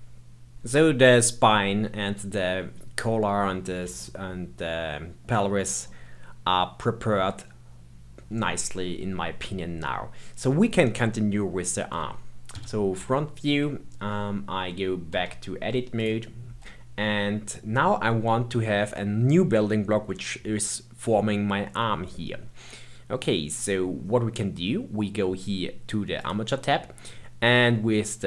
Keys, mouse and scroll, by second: 1.5-8.8 middle drag, 12.5 KP_1, 13.0-15.1 scroll down 1, 15.1 Tab, 15.9 click, 26.1 click, 26.9-27.6 scroll down 3.